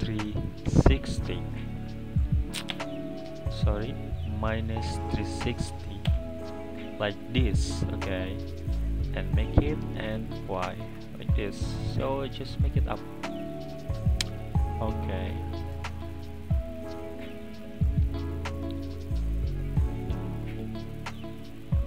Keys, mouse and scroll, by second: 3.5-6.5 drag, 7.4-10.4 middle drag, 11.1-12.7 drag, 13.3 click, 13.6-16.4 middle drag, 16.4-16.8 scroll down 2, 16.8-18.1 middle drag, 18.1 click, 19.3 click, 19.9 scroll down 1, 19.9-20.9 middle drag, 20.9 click, 21.4 click.